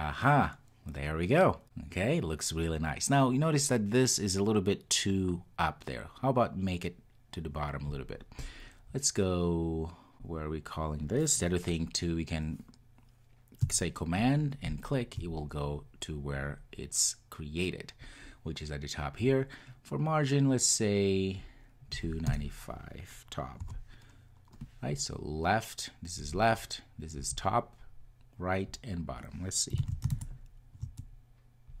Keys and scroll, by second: 14.7 super+b, 15.3 super+b, 29.9 super+s.